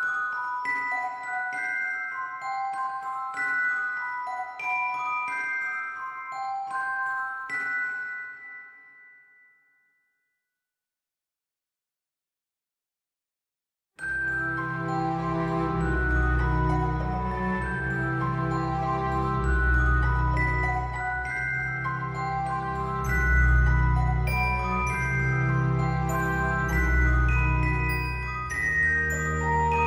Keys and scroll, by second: 17.7 ctrl+z.